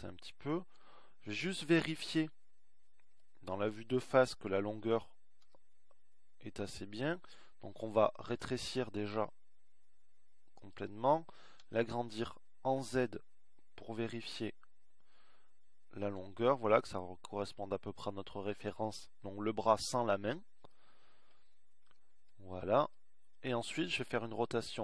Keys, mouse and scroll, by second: 4.9 g, 7.9 s, 11.1 s.